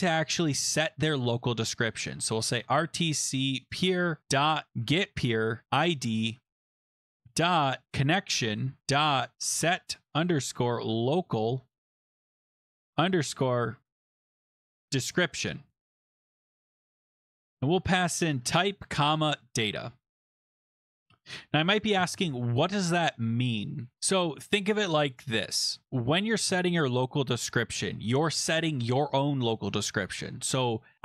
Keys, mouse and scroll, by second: 2.1-15.2 typing, 6.3 Down, 6.8 Up, 6.8 Right, 16.8 click, 17.2 click, 17.4-20.0 typing, 20.7 click.